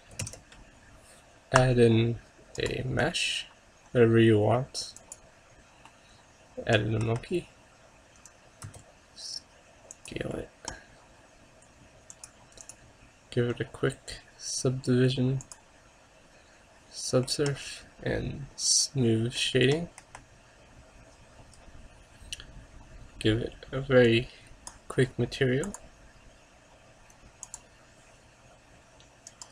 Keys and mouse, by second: 0.3 shift+a, 6.0-7.1 middle drag, 7.1 KP_0, 8.7 s, 12.3-14.7 drag, 17.3-19.4 middle drag, 18.8-20.1 drag, 19.6 middle click, 20.1 KP_0, 20.3 click, 24.1-27.5 drag, 29.4-29.5 drag.